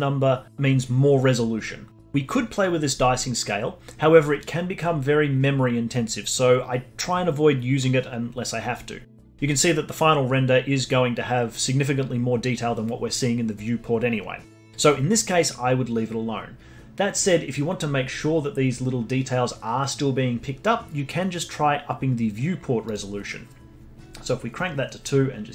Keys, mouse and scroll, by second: 22.8-25.5 drag.